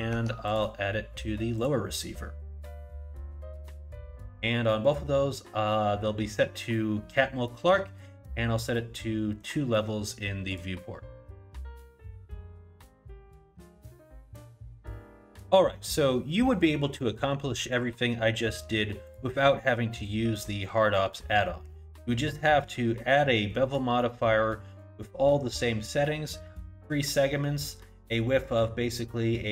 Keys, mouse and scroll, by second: 0.2 Tab, 0.5 click, 1.6 click, 9.4 click, 10.5 click, 12.2 click, 14.2 click, 17.7 click.